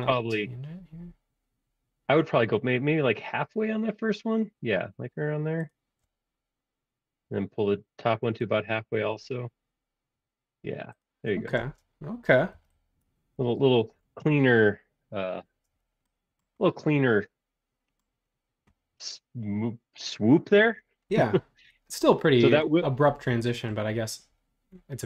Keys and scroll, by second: 11.6 space, 12.5 e, 13.6 space.